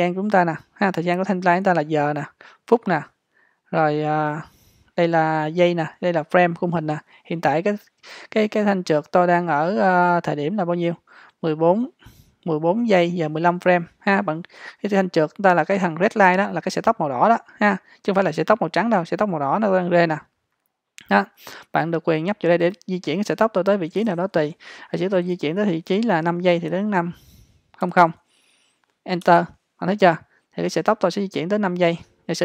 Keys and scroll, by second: 26.7 5, 27.8 typing, 29.3 Return.